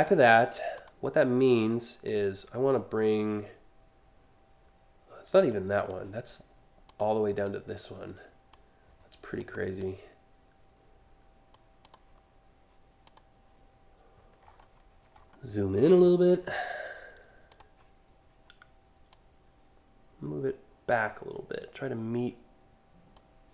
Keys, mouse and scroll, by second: 0.4 click, 1.7-5.2 drag, 5.4 click, 6.5 click, 7.1-8.2 drag, 9.0 click, 9.4-11.1 drag, 11.5 click, 12.7 click, 14.1 scroll up 2, 14.8 alt+scroll up 1, 17.1 click, 18.7-22.8 drag.